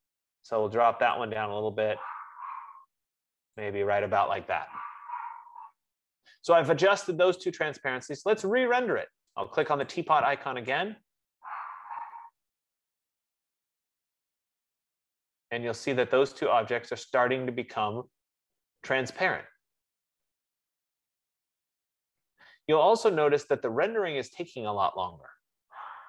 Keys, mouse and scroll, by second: 3.8 click, 10.2 click, 13.3-15.2 drag, 20.7 F15.